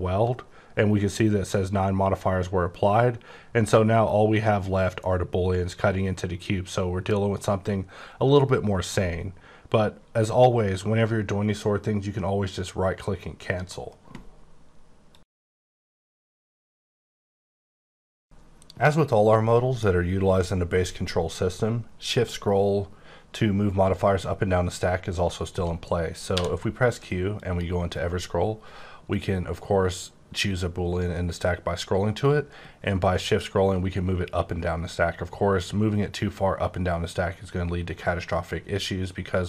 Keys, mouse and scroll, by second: 3.6-4.1 scroll up 10, 4.2-4.8 scroll down 11, 4.8-5.4 scroll up 13, 5.4-5.9 scroll down 10, 5.9-6.4 scroll up 12, 6.4 scroll down 10, 6.9 scroll, 7.0 scroll up 7, 7.6-7.9 scroll down 9, 8.3 scroll up 5, 8.8 scroll down 8, 13.5 right click, 26.3 q, 27.2 click, 28.5-28.9 scroll down 4, 29.5-31.0 scroll down 1, 31.0-31.5 scroll up 4, 31.5-32.2 scroll down 4, 32.5-33.1 shift+scroll up 8, 33.4-34.2 shift+scroll down 10, 34.2-34.8 shift+scroll up 10, 35.3-36.8 shift+scroll down 8, 37.0-37.3 scroll down 1, 37.3-38.3 shift+scroll up 8, 38.3-38.9 shift+scroll down 5, 38.9-39.4 shift+scroll up 6.